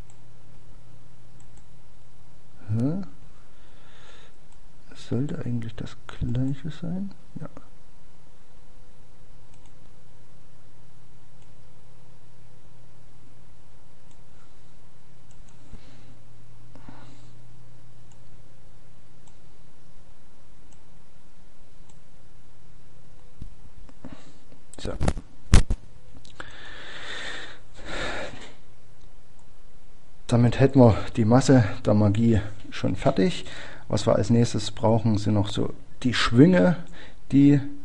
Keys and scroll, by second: 1.3 Page_Down, 4.5 Page_Down.